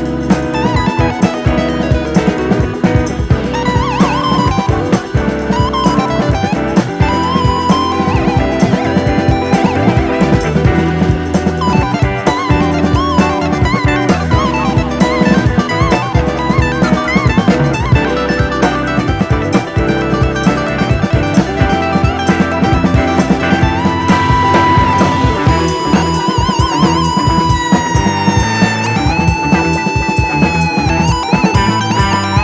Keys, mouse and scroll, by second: 0.3 scroll up 1, 0.5 click, 1.1 Delete, 2.0 click, 3.0-3.5 scroll up 1, 3.5 e, 6.0 scroll down 2, 6.1 middle click, 6.3 alt+/, 6.5 scroll up 1, 6.6 middle click, 7.6 Tab, 8.0 click, 8.9 click, 9.6-10.3 drag, 11.9 drag, 14.1 scroll down 1, 14.3-15.1 middle drag, 15.1 scroll up 3, 15.3 shift+middle click, 16.2-17.7 drag, 17.7 scroll down 1, 17.9-18.8 middle drag, 18.8-19.8 drag, 20.0-21.0 drag, 21.9 scroll up 1, 22.4 scroll down 2, 22.6-23.6 middle drag, 23.9 click, 24.7-25.7 middle drag, 26.0-27.0 drag, 27.3 click, 28.3 scroll down 3, 28.5-29.2 middle drag, 29.2-29.6 drag, 29.9 scroll up 1, 30.0-30.6 middle drag, 30.6 scroll up 1, 31.3-32.4 drag.